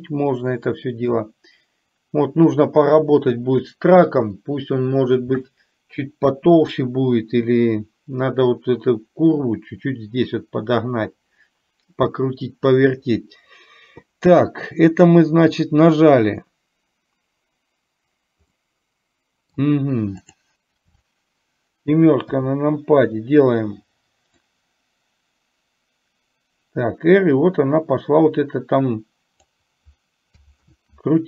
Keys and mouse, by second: 0.0-1.2 middle drag, 15.0 click, 18.7-19.6 middle drag, 20.4 click, 24.6-29.6 drag, 30.7 ctrl+z.